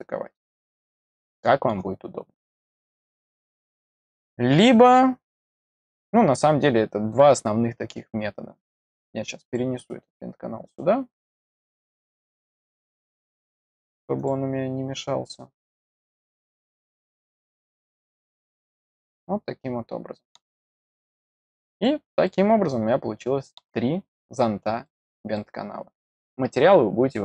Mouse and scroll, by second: 3.1 click, 4.9 middle click, 7.2 click, 9.4 click, 11.9 click, 12.9 middle click, 14.1 click, 15.6 click, 16.8 click, 17.8-20.9 middle drag, 21.6 click, 22.2-23.5 middle drag, 23.9-24.8 scroll up 1, 24.8 middle click.